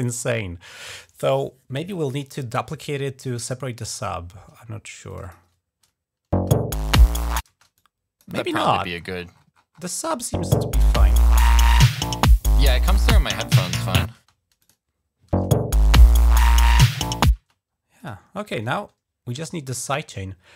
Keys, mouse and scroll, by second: 4.9 click, 5.0 click, 6.1 space, 7.3 space, 7.5 click, 8.4-9.6 scroll up 4, 9.7 click, 10.1 space, 11.9 click, 14.0 space, 14.4 click, 15.1 space, 17.1 space, 17.8 click.